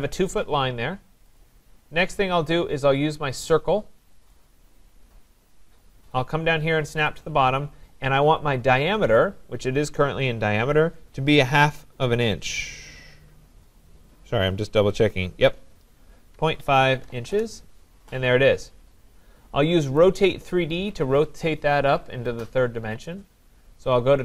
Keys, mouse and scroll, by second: 1.4 click, 4.3 click, 4.8-5.2 scroll, 7.1 click, 16.1-17.6 typing, 19.0 scroll down 5, 20.0 click, 21.7 scroll.